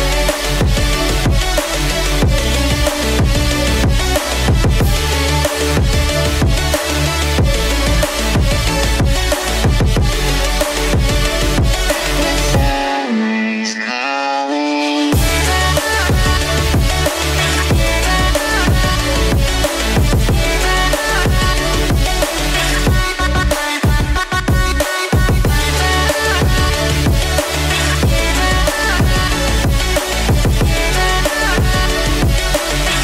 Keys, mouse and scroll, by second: 3.3 click, 3.6-4.3 scroll down 2, 4.3 click, 4.9-6.7 middle drag, 8.4 g, 8.9 z, 11.9 click, 12.7-13.5 middle drag, 14.7 Tab, 16.3 middle click, 17.5 KP_1, 20.0 g, 20.0 z, 21.2 click, 23.9 e, 24.5 z, 25.5 click, 27.2 click, 29.9 g, 30.6 c, 31.4 z, 32.9 click.